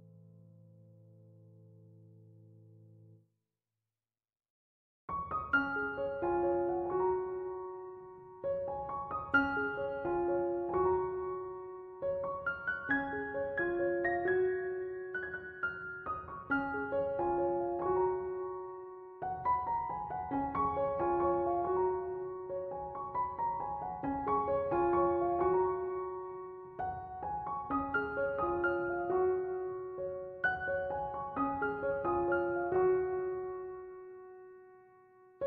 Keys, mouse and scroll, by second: 0.0 0, 0.1 Return, 4.3 3, 4.6 9, 4.8 Return, 8.9 5, 9.1 0, 9.9 Return.